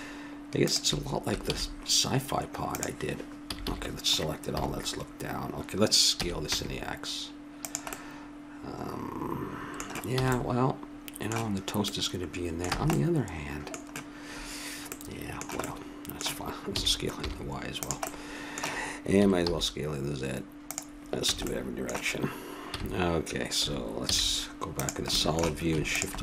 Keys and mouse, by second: 1.5 ctrl+e, 3.4 a, 3.6 a, 4.4 KP_7, 6.1 s, 10.2 a, 12.7 a, 16.7 s, 19.1 s, 21.3 a, 21.6-23.3 middle drag, 22.7 x, 24.0 z, 25.3-26.2 middle drag, 25.8 click, 25.8 right click.